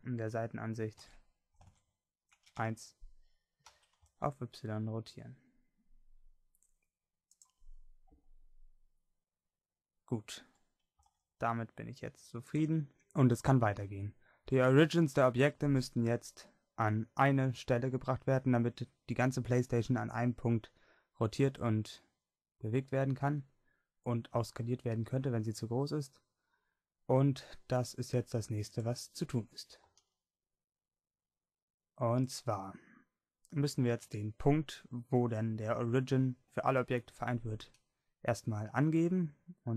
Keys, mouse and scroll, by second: 1.1 KP_3, 1.7 ctrl+KP_3, 2.6 KP_1, 3.7 r, 8.9-10.5 drag, 10.5 r, 10.5-12.5 drag, 29.9 r.